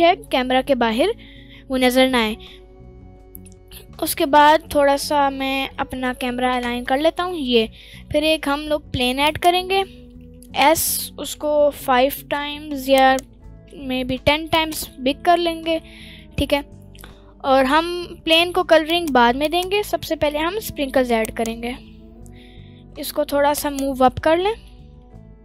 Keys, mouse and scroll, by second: 1.3 scroll down 1, 1.5 scroll up 1, 3.2 scroll up 1, 3.8 scroll down 1, 4.3-5.8 middle drag, 7.9 shift+a, 10.2 s, 12.9 right click, 13.3 s, 13.6 1, 14.2 0, 14.5 click, 14.8-15.4 scroll down 2, 15.0-15.3 middle drag, 15.6 middle drag, 16.3-16.8 scroll down 1, 17.1-18.0 scroll up 3, 17.8 middle click, 18.9 click, 19.4 shift+click, 20.2 g, 21.2 ctrl+right click, 21.7 g, 21.8 z, 23.6 ctrl+right click, 24.1-24.4 middle drag, 24.7 g.